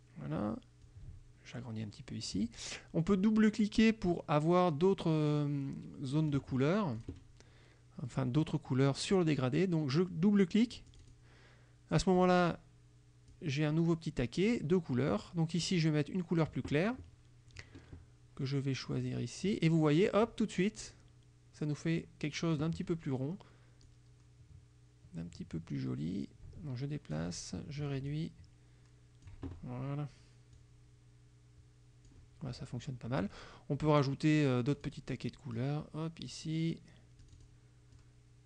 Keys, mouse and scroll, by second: 1.0-2.6 ctrl+drag, 7.1 click, 8.2 click, 11.0 click, 12.3 click, 13.4-14.8 drag, 15.7 click, 19.1 click, 23.9-27.4 drag, 28.2-29.5 ctrl+drag, 30.7-32.4 drag, 34.8 click, 35.6 click, 37.3 click, 38.0-38.4 drag.